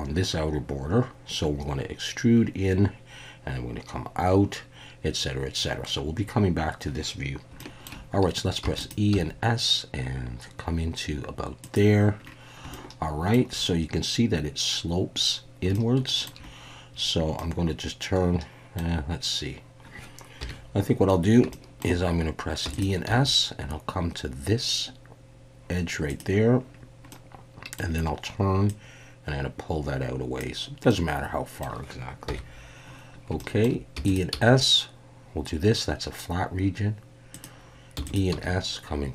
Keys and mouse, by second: 8.6 e, 8.8 click, 9.1 s, 11.6 click, 12.7 shift+middle click, 15.8 shift+middle click, 17.4-18.8 middle drag, 20.4 KP_1, 21.5 shift+click, 22.6 e, 22.7 click, 23.1 s, 26.1 click, 27.1 middle click, 28.8-30.4 drag, 30.9 middle click, 32.3 KP_1, 33.4 shift+middle click, 34.0 e, 34.3 s, 37.3 click, 38.0 e, 38.0 click, 38.3 s.